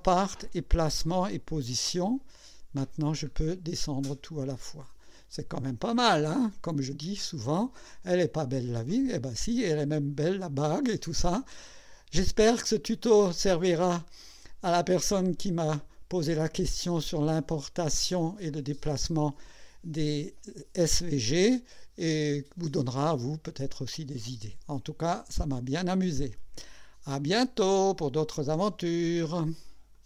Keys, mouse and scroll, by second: 0.8 click, 1.8 click, 2.8 scroll down 2, 4.0 click, 5.3 click, 7.6 click, 8.5-12.8 drag, 13.9 right click, 15.2-24.8 drag, 25.1 scroll up 1, 25.5 scroll down 1.